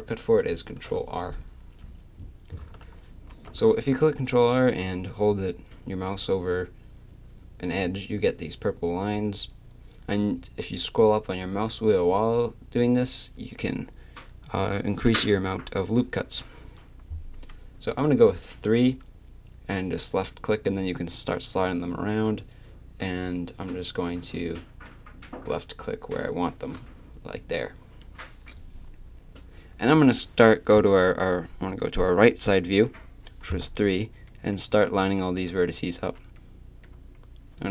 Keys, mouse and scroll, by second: 0.7 ctrl+r, 3.3 ctrl+r, 27.3 a, 32.2 KP_3, 35.3 a, 36.0 a, 36.9 a.